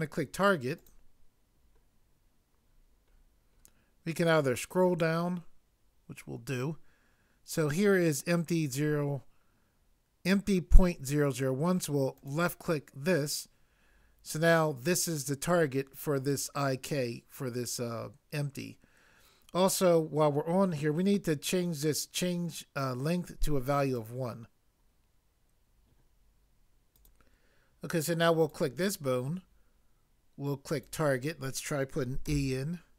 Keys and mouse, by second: 32.2 e.